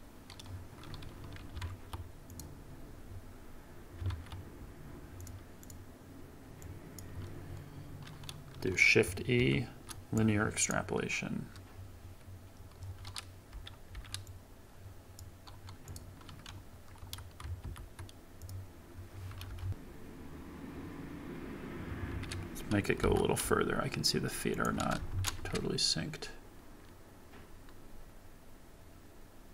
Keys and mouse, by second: 2.3 click, 4.1 ctrl+Tab, 5.6 click, 6.6 click, 9.3 shift+e, 13.5 space, 14.2-15.2 drag, 14.2 space, 15.8 click, 17.0 a, 17.6 shift+e, 19.6 shift+Left, 22.1 space, 23.0 g, 23.0 y, 25.1 shift+Left, 25.4 space.